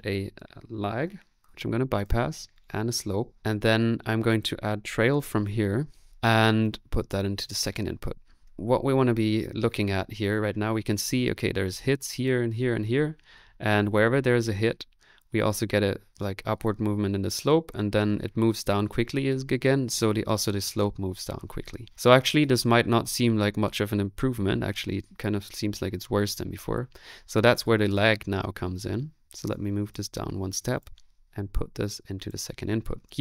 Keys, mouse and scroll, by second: 0.7-1.5 typing, 2.7-3.8 typing, 4.8-6.1 typing, 6.1 middle click, 6.6 click, 7.1-8.4 drag, 8.4-9.9 middle drag, 8.4 space.